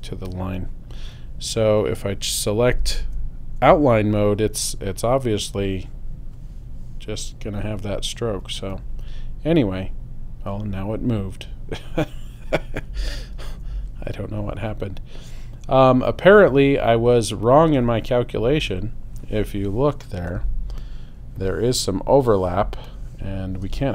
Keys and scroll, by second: 3.0 super+y, 13.3 super+0, 20.9 super+space.